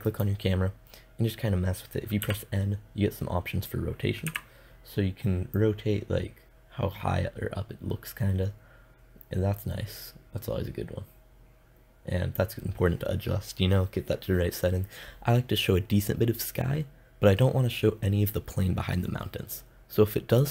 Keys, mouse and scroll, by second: 1.7 n, 3.7 KP_0.